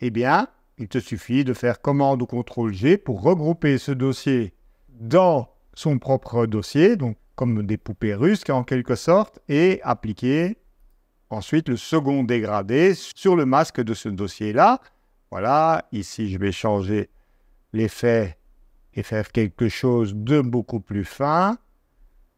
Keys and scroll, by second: 2.5 super+g.